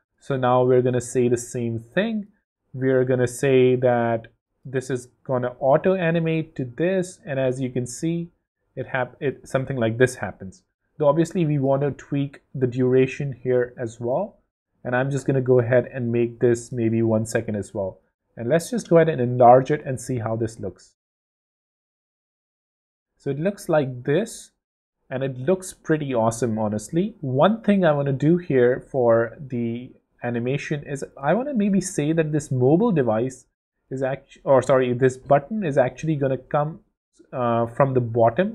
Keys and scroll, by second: 8.1 w, 20.0 w, 22.4 w, 24.8 w, 38.2 shift+super+z.